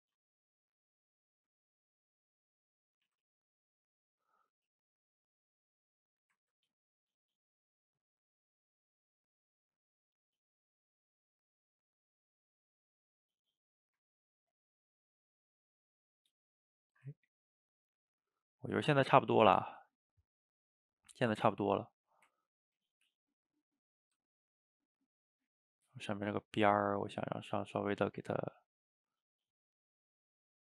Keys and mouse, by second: 0.3 middle click, 0.9 shift+click, 1.7 middle click, 2.5 shift+click, 3.1 ctrl+z, 3.5-6.5 shift+drag, 6.5 ctrl+z, 6.9 shift+click, 7.2 middle click, 8.0 click, 8.5 middle click, 9.1-11.5 drag, 11.5 middle click, 12.3 shift+click, 12.9-18.1 middle drag, 18.1 shift+click, 18.4-25.1 middle drag, 25.1-28.5 drag, 28.5 f, 29.0 middle click, 29.3-30.6 drag.